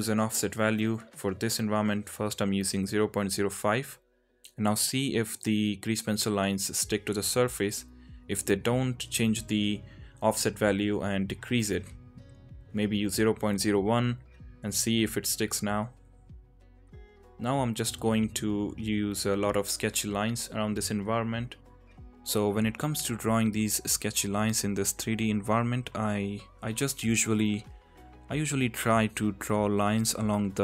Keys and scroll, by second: 1.7 ctrl+z, 2.0 ], 2.2 ], 2.9 ], 3.0 ctrl+z, 6.2 ctrl+z, 6.4 ctrl+z, 7.0 ], 7.0 ], 7.8 ctrl+z, 10.5 ctrl+z, 10.7 ctrl+z, 10.9 ctrl+z, 15.5 ctrl+z, 15.9 ctrl+z, 16.2 ctrl+z, 25.3 ctrl+z.